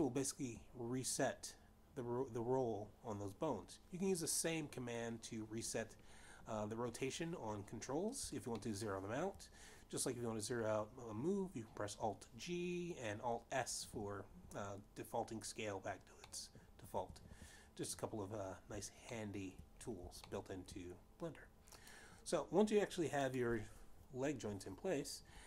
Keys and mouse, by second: 9.4 shift+middle click, 16.8 shift+middle click, 19.9 shift+middle click, 21.1 shift+middle click, 22.4 click.